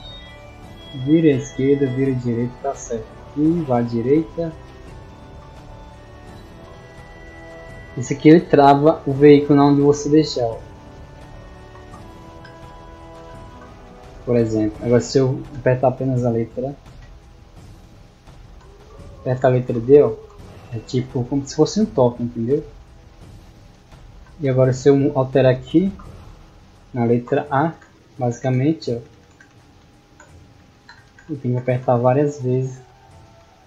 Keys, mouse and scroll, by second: 6.8 d, 8.0 a, 8.5 a, 9.4 a, 9.9 d, 11.2-14.4 typing, 16.5 a, 18.6-21.4 typing, 24.7 click, 27.4-33.4 typing.